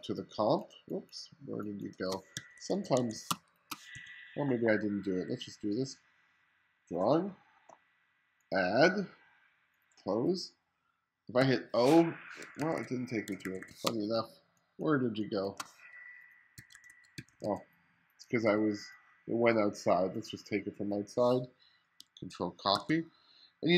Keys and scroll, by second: 2.4 1, 3.3 space, 4.0 2, 11.5 o, 12.6 1, 13.9 space, 16.6 1, 17.2 2, 18.4 2, 22.8 super+c.